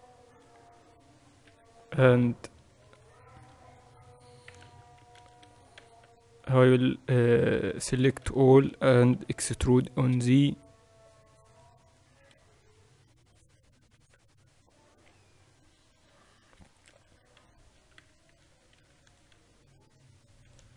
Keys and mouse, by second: 2.1 KP_1, 4.5-6.5 drag, 5.3 ctrl+z, 5.8 a, 6.1 a, 6.5 Tab, 7.1-8.9 drag, 8.5 Tab, 8.7 a, 8.8 a, 13.0 KP_8, 13.2 KP_8, 14.1 KP_6, 14.6 Tab, 18.4 Tab, 19.5 ctrl+r.